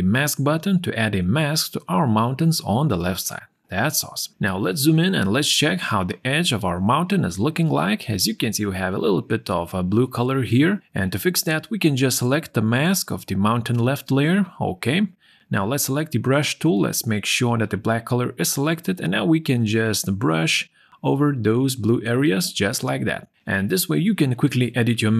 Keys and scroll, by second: 3.4 z, 24.6 ctrl+o.